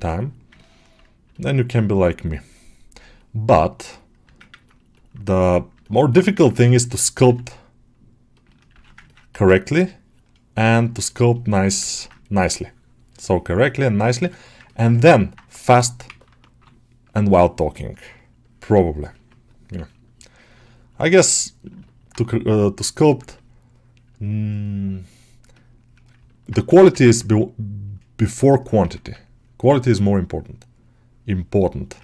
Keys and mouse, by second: 0.0 middle click, 0.6 middle click, 1.2 alt+middle click, 1.7-4.2 right drag, 4.3 ctrl+middle click, 4.8 middle click, 5.2 right click, 5.7 alt+middle click, 6.0 shift+middle click, 6.3 ctrl+middle click, 6.5 middle click, 8.6 r, 8.9 ctrl+middle click, 9.2 middle click, 10.5 q, 11.8 ctrl+middle click, 12.8 shift+click, 14.1 alt+shift+middle click, 14.3 alt+middle click, 14.5 ctrl+alt+middle click, 15.1 alt+middle click, 15.9 1, 15.9 [, 16.4 [, 17.8 ctrl+click, 18.6 click, 19.9-21.7 drag, 21.7 middle click, 22.0 1, 22.3-26.1 drag, 26.1 middle click, 26.5 g, 26.9 middle click, 28.7 1, 29.1-31.9 ctrl+drag, 31.9 middle click.